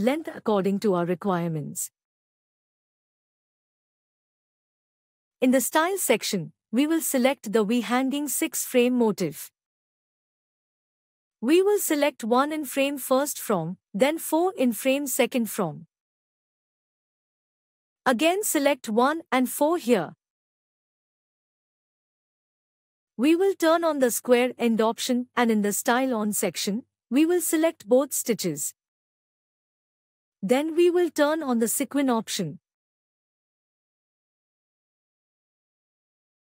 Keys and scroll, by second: 32.2 ctrl+alt+e.